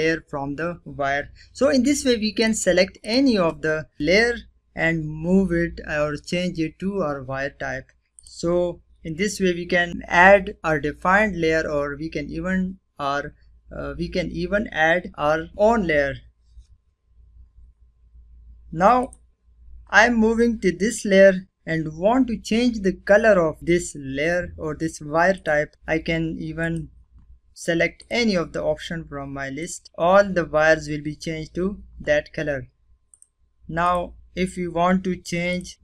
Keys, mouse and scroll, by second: 1.2 click, 2.2 click, 3.9 scroll down 1, 7.0 click, 17.9 click, 24.2 click, 24.6 typing, 31.9 click, 34.3 click.